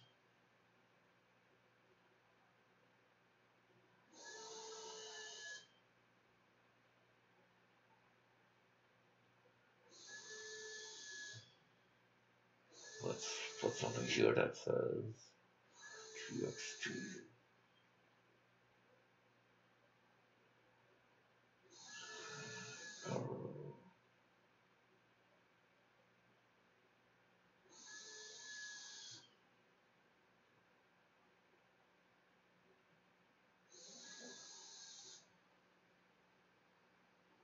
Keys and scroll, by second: 10.7-13.4 typing, 12.0 Return, 15.2 e, 16.6-20.1 typing, 29.8-36.6 typing.